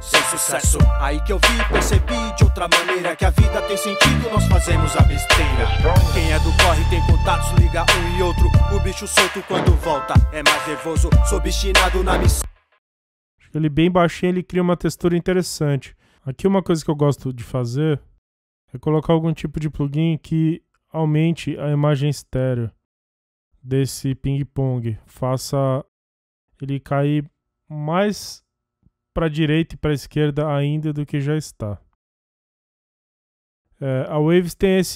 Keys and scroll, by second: 12.5 space.